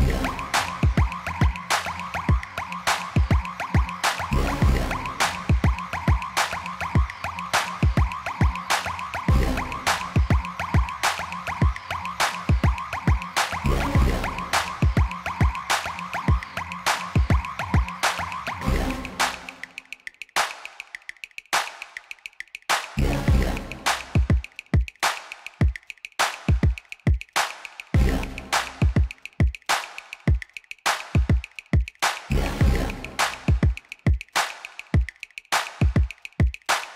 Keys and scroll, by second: 2.6 3, 4.1 e, 7.0 3, 9.0 a, 10.8 e, 11.8 x, 14.9 a, 16.1 g, 16.8 x, 19.0 7, 24.4 g, 26.1 x.